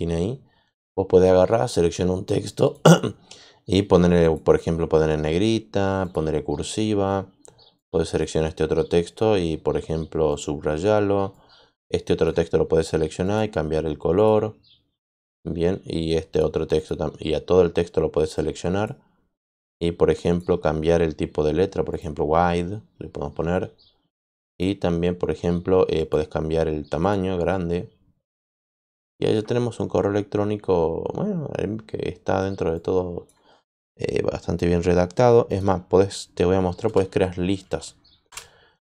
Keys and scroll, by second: 36.8 BackSpace, 38.2 Return.